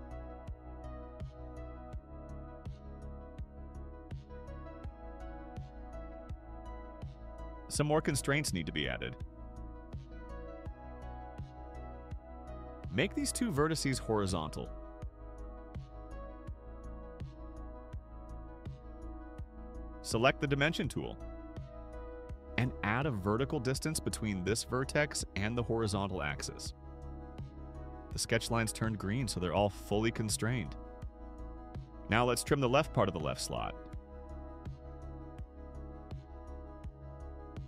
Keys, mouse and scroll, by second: 0.3 click, 3.9 click, 4.8 middle click, 4.8-5.3 scroll down 4, 5.2 middle click, 5.7 right click, 7.0-10.4 drag, 10.7 click, 12.5 click, 13.6 click, 17.6 click, 21.1 click, 23.1 click, 23.9 click, 25.3 2, 25.8 Return, 28.2 middle click, 28.2 scroll down 2, 32.5 middle click, 37.0 click.